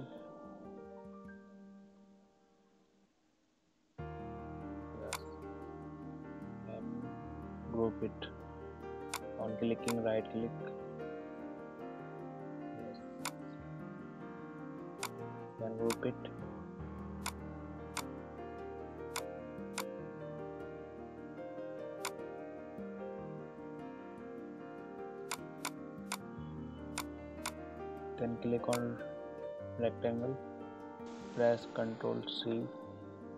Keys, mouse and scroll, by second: 5.1 click, 9.2 right click, 13.2 click, 17.9 right click, 19.1 click, 22.0 right click, 25.3 click, 26.1 right click, 26.9 click.